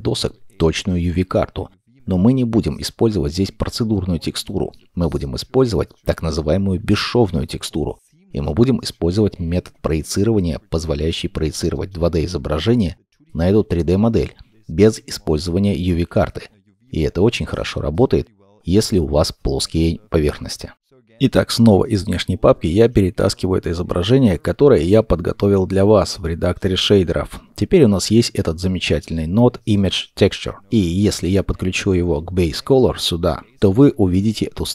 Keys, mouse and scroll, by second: 2.1 middle click, 29.2-30.6 scroll up 1, 30.6 middle click.